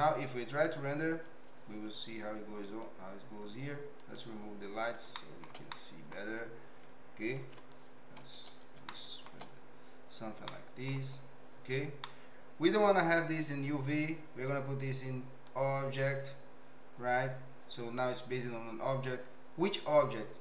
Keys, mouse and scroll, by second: 2.6-4.5 drag, 5.2 shift+middle click, 5.7-6.2 middle drag, 7.4 ctrl+b, 9.0 shift+middle click, 10.4 middle click, 12.0 middle click, 14.5-15.5 drag.